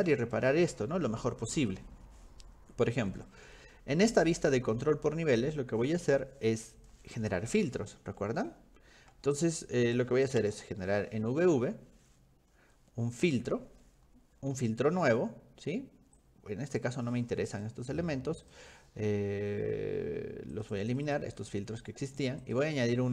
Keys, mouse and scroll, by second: 6.8 click, 7.4 middle click, 8.5 middle click, 9.0 scroll down 2, 9.3 shift+middle click, 10.9 v, 13.3 click, 16.2 click, 17.5 click, 18.4 click, 20.6 click, 20.7 click, 20.9 click, 21.1 click, 21.4 click, 22.4 click.